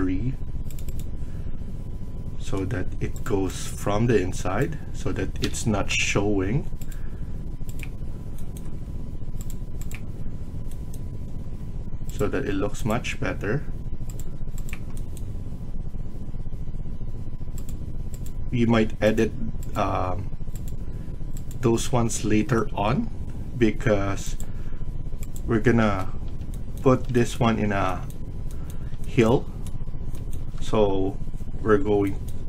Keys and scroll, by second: 5.3-5.8 typing, 25.7 Escape.